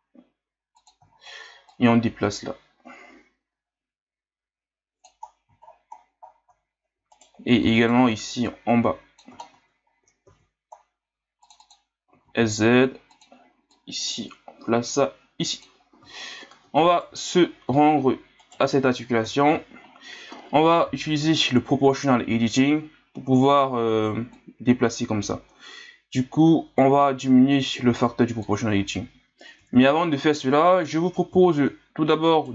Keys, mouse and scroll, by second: 1.1 scroll up 4, 1.7-4.7 drag, 5.3-7.1 scroll down 16, 7.1 alt+right click, 7.8 alt+right click, 8.4 click, 9.4 scroll down 1, 9.8-10.3 scroll up 1, 10.3 ctrl+r, 12.1 s, 13.7-16.1 drag, 16.1 scroll up 3, 16.9 alt+right click, 18.4 alt+right click, 19.2 KP_3, 19.8 scroll up 2, 20.9 o, 24.3-27.3 drag, 29.6 ctrl+z, 30.7 KP_1, 31.5 scroll up 6, 32.3 right click.